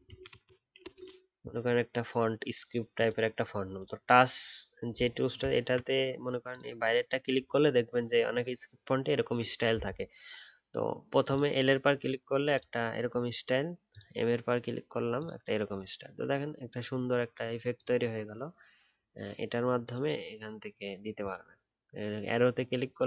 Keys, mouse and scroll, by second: 5.4-6.8 alt+scroll up 1.